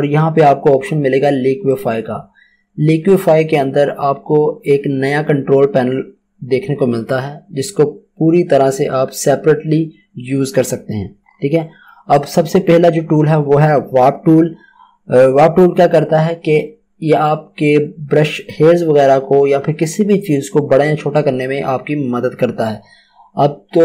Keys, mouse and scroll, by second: 8.5 click, 11.2-13.4 scroll up 1, 16.5-18.6 scroll up 1.